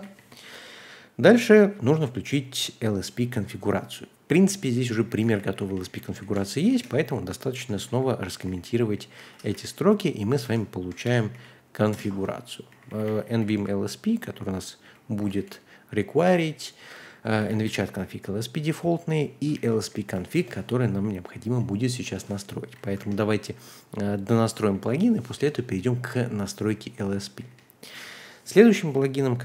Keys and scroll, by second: 4.5-18.5 typing, 19.5 ctrl+h, 19.9-22.0 typing, 23.0 ctrl+h, 24.4 typing, 26.1-27.8 typing.